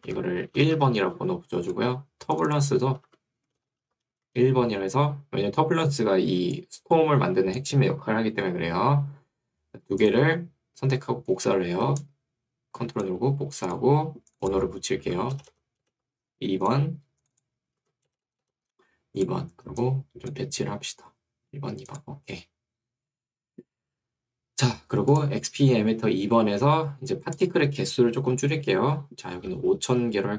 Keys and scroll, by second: 0.1 Right, 0.9 1, 3.1 Right, 3.7-4.6 typing, 8.5 Escape, 15.1 Right, 15.5 BackSpace, 16.1 2, 17.9 Right, 18.1 BackSpace, 18.7 2, 29.5 0.